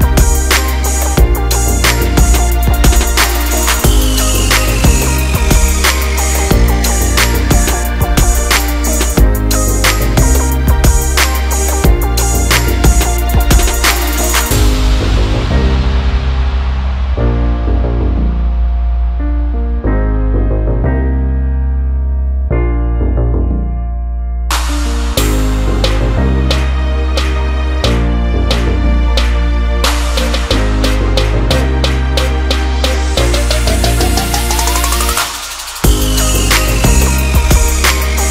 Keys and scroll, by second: 7.3 Return, 12.8 ctrl+alt+z.